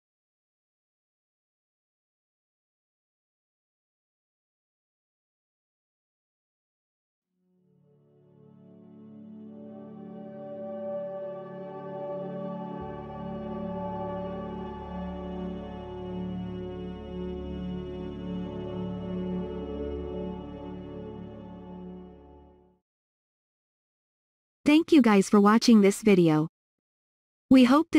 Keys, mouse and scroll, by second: 8.5-9.4 typing, 9.5 Return, 10.5-11.2 typing.